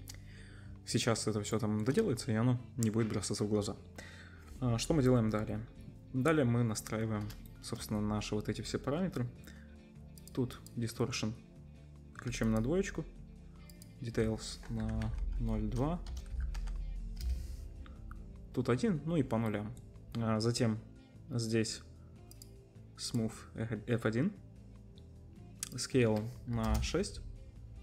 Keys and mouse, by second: 10.2 middle click, 10.5-12.6 drag, 12.6-13.7 middle drag, 13.7-27.8 drag.